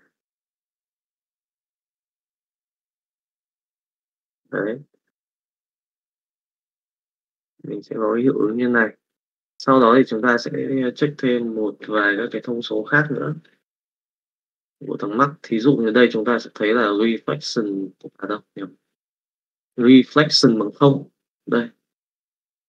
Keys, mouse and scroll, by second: 1.6 middle click, 4.9 middle click, 6.5-8.5 middle drag.